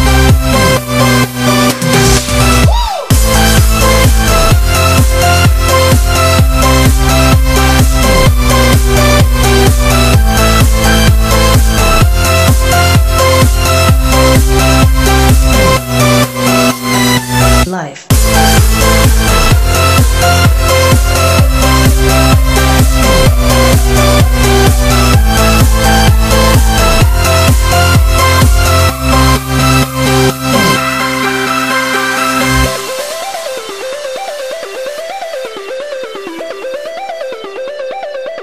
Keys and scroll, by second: 18.8 super+=, 19.1 super+=, 19.2 super+=, 21.2 x.